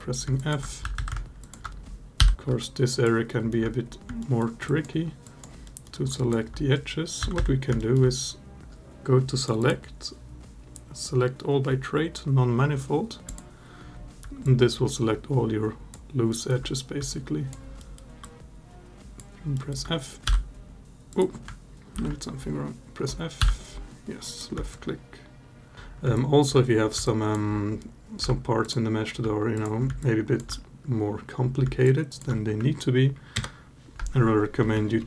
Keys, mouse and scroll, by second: 0.1 alt+click, 0.6 a, 0.7 a, 1.2 alt+shift+click, 2.0 f, 2.3 alt+a, 2.4 alt+click, 3.0 alt+middle click, 4.0 alt+middle click, 4.4 alt+click, 5.0 alt+click, 5.4 alt+middle click, 5.9 alt+click, 7.0 a, 7.1 a, 7.6 alt+middle click, 8.7-9.1 drag, 9.5-13.2 drag, 14.3-15.7 alt+drag, 16.1 alt+middle click, 17.0 alt+click, 17.6 alt+middle click, 18.1-19.1 alt+drag, 19.3 alt+middle click, 20.1 r, 20.9 click, 21.8 ctrl+z, 23.2 f, 24.5-25.7 alt+drag, 25.9 alt+click, 26.8 alt+click, 28.0 3, 29.8 alt+click, 31.6 alt+click, 33.1 ctrl+KP_Add, 34.8 ctrl+KP_Add.